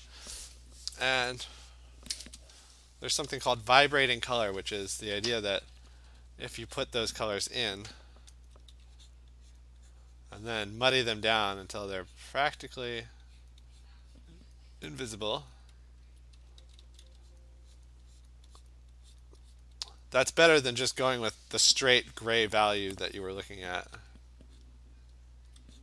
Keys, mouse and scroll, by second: 1.0 click, 1.1-2.1 click, 1.3 click, 1.3 click, 1.4 click, 2.2 click, 2.3 click, 5.7 ], 6.0 ], 6.2 ], 6.8 click, 8.5 alt+click, 9.2 click, 9.6 click, 10.2 click, 10.5 click, 10.6 alt+click, 11.0 click, 11.2 alt+click, 11.4 click, 11.8 click, 12.2 click, 12.7 click, 13.1 click, 13.5 click, 13.9 click, 14.5 click, 15.5-20.6 alt+click, 16.4 [, 16.6 [, 16.8 [, 17.1 [, 17.4 click, 17.9 click, 18.3 click, 18.7 click, 19.2 click, 19.8 click, 20.0 click, 20.4 click, 24.1-24.7 alt+click, 24.7 click, 25.0 click, 25.5 alt+click.